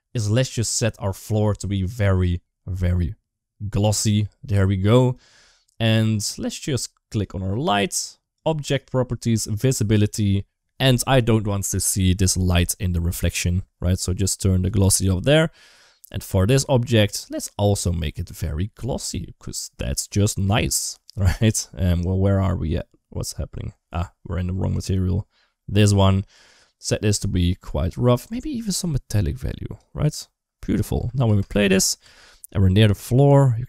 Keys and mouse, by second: 1.7-4.9 drag, 6.9 click, 9.3 click, 14.7 click, 15.9 click, 17.1 click, 17.8 click, 20.9 click, 21.3 click, 24.5 click, 27.1-28.2 drag, 28.6-29.6 drag, 30.8-31.9 typing, 32.3-33.6 drag.